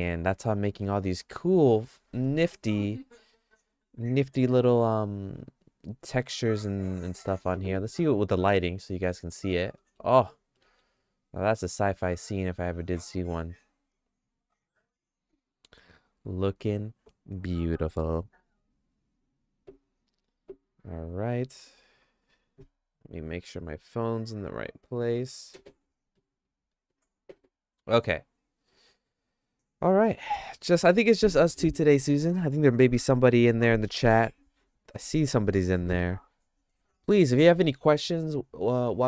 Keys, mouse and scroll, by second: 0.4 middle click, 0.8 shift+middle click, 9.1 right click, 9.8 middle click, 10.6 shift+middle click, 11.0-15.5 shift+middle drag.